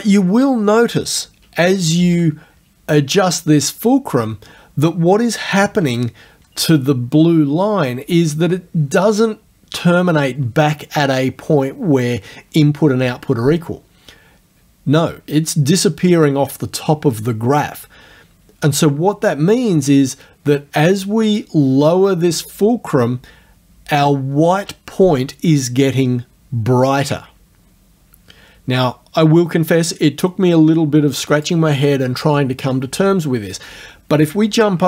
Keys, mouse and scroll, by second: 2.0 shift+F9, 5.7 F9, 21.4-31.6 drag.